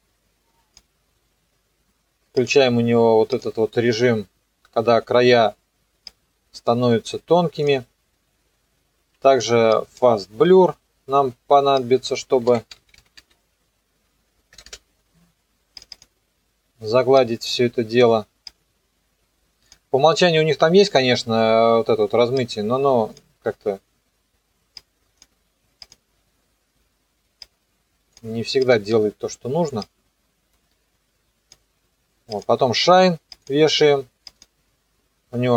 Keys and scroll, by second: 12.2-14.7 typing.